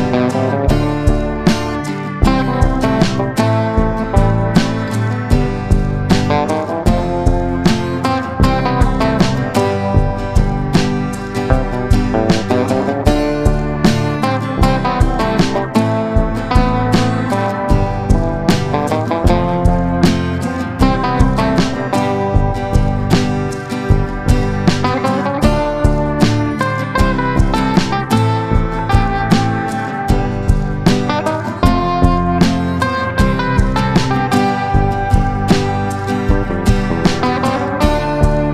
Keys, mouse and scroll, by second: 20.5 ctrl+scroll, 29.0-29.7 ctrl+scroll, 30.5 ctrl+click.